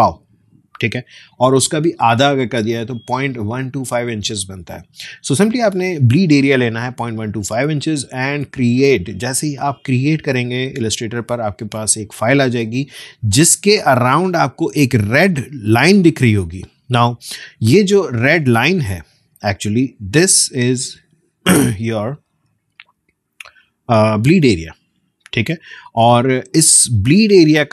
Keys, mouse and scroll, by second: 9.6 click, 19.4 click.